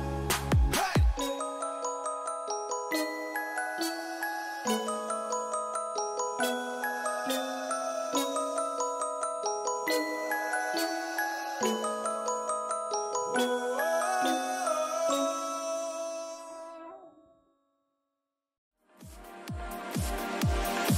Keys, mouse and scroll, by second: 0.4-4.5 drag.